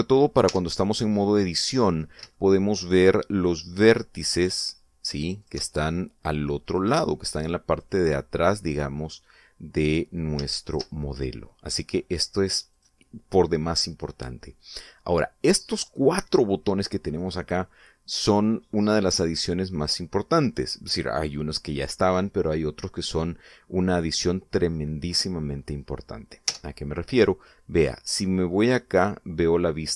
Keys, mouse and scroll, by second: 1.3 Tab, 1.6-2.8 middle drag, 3.0 shift+scroll up 1, 3.2-4.2 shift+middle drag, 5.2 click, 6.2 shift+click, 7.5 click, 8.5 click, 8.9 middle click, 11.4 shift+click, 13.5 click, 27.3 Tab, 29.7 click.